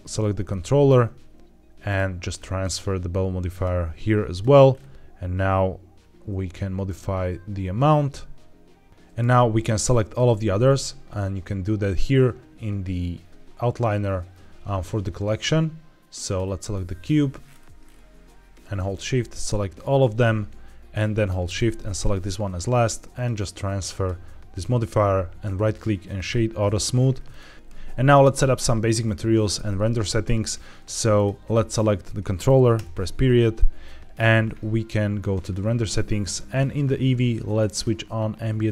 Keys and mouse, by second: 0.4-0.7 shift+middle drag, 2.6-3.5 drag, 6.8-8.9 shift+drag, 9.7 click, 16.2 click, 21.4 shift+click, 23.0-23.9 drag, 25.4-26.2 right drag, 31.1 click, 31.6 click, 32.6 KP_Decimal, 33.5-34.0 middle drag, 37.6 click.